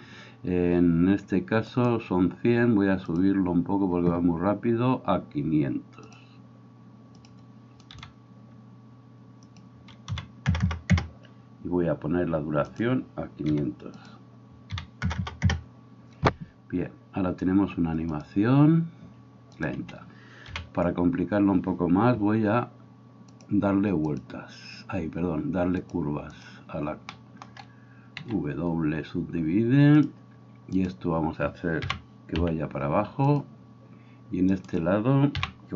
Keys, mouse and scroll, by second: 1.8 right click, 3.2-12.8 drag, 7.9 KP_5, 10.6 KP_0, 12.8-14.1 middle drag, 13.5 KP_5, 14.1-19.6 drag, 15.1 KP_0, 19.6-23.4 middle drag, 19.8 Escape, 20.5 KP_1, 23.4-33.4 drag, 28.2 w, 30.8 middle click, 30.8 right click, 31.9 g, 33.4-35.7 middle drag, 35.4 g.